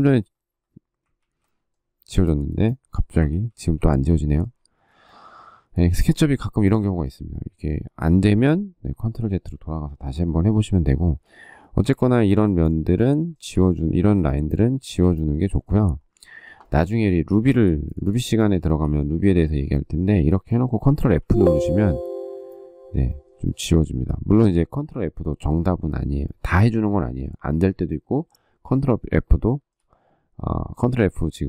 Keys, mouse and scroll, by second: 1.0 ctrl+z, 3.1 ctrl+z, 3.7 ctrl+z, 10.8 ctrl+z, 11.7 ctrl+z, 13.0 shift+middle click, 16.4 shift+middle click, 17.3 space, 18.5 shift+middle click, 21.0 ctrl+f, 23.2 shift+middle click, 23.4 shift+double middle click, 29.2 shift+middle click.